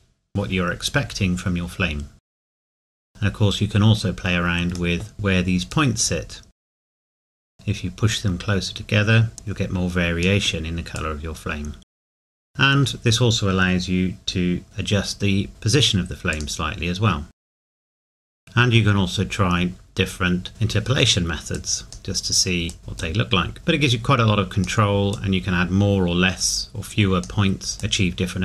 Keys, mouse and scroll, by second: 2.2 click, 3.3 middle click, 3.9-4.7 scroll down 1, 5.7 click, 12.4 scroll down 1, 12.4 middle click, 13.3-13.8 scroll up 1, 15.5 click, 17.4 KP_Enter, 17.8 scroll down 1, 17.9 scroll up 1, 18.3 shift+middle click, 21.5 click.